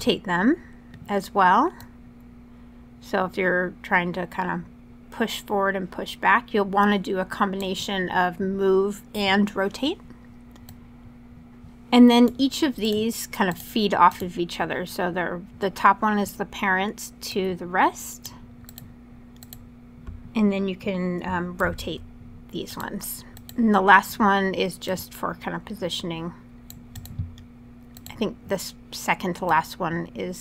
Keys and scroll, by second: 21.4 super+z.